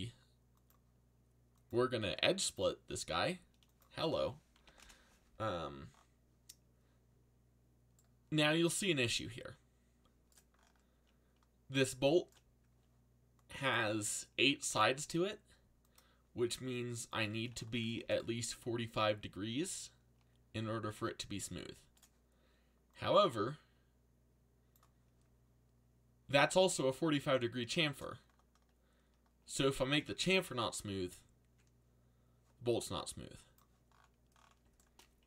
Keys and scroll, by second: 4.3-5.1 typing, 17.9 alt+a.